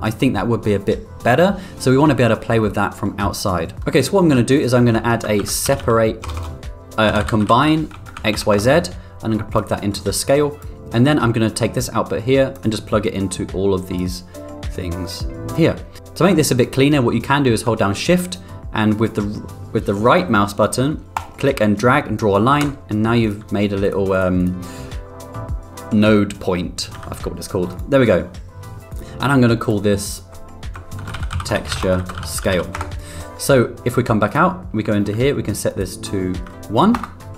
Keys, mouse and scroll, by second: 4.6 ctrl+shift+z, 5.5 shift+a, 6.3 BackSpace, 10.1 click, 11.6 click, 13.1 click, 14.7 click, 16.2 middle click, 21.1-22.1 right drag, 23.2 click, 23.8 click, 24.3 click, 26.9 g, 28.9 click, 29.6 click, 30.0-33.3 drag, 34.3 drag, 35.7-37.3 drag.